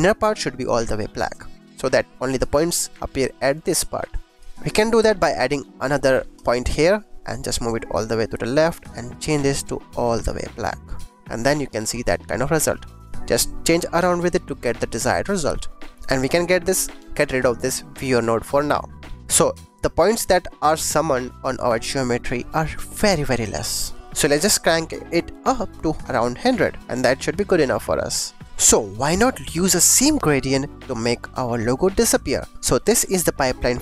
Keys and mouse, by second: 6.3 click, 7.4-8.4 drag, 9.0 click, 13.0-15.9 drag, 16.1 click, 16.3 click, 16.5 click, 18.6 x, 19.1 ctrl+s, 20.9 click, 24.6-26.8 drag, 27.4 click, 28.4 click, 29.1 click.